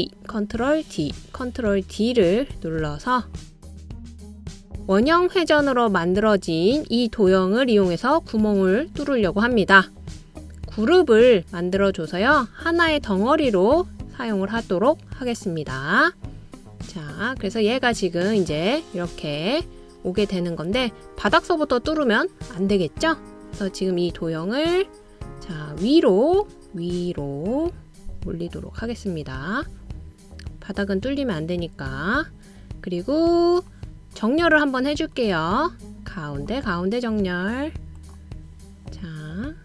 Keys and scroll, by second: 0.3 super+d, 0.9 super+d, 1.3-2.4 super+d.